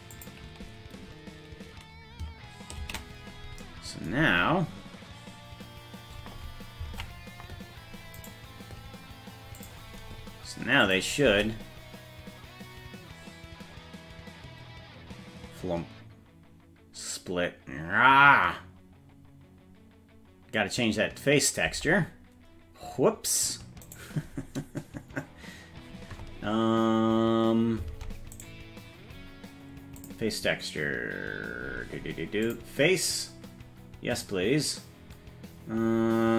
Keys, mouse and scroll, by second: 3.0 ctrl+s, 5.0-5.8 scroll down 1, 5.8-6.8 scroll down 4, 7.1 ctrl+Tab, 8.3 right click, 9.6 click, 10.8 click, 11.2 space, 21.7 space, 23.8 right click, 27.9 ctrl+Tab, 28.4 right click, 30.0 click, 31.6-32.5 scroll up 6, 32.5 click, 32.5-32.9 scroll up 2.